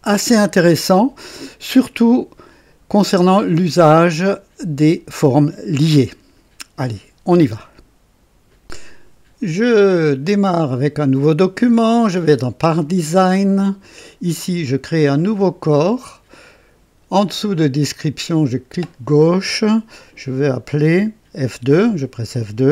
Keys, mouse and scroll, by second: 8.5 right click, 10.3 click, 13.8 click, 15.6 click, 18.4 click, 21.5 F2.